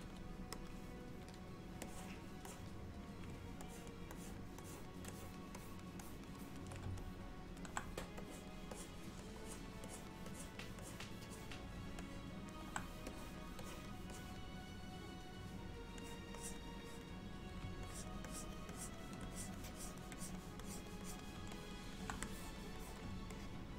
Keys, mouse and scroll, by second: 0.1 f, 1.9 click, 2.5 click, 3.7 ctrl+click, 3.9 ctrl+click, 4.2 click, 4.7 click, 5.2 ctrl+click, 5.6 ctrl+click, 6.1 ctrl+click, 6.5 ctrl+click, 7.1 middle click, 8.3 click, 8.8 click, 9.5 click, 10.0 click, 10.4 click, 10.9 click, 11.4 click, 12.1 alt+middle click, 13.2 click, 13.7 click, 14.2 click, 16.1 click, 16.4 click, 16.9 click, 17.9 ctrl+click, 18.3-19.2 ctrl+click, 18.8 ctrl+click, 19.4 click, 19.7 click, 20.2 click, 20.7 click, 21.1 click, 21.4 ctrl+click, 21.6 middle click, 22.3 click, 22.9 click, 23.4 middle click.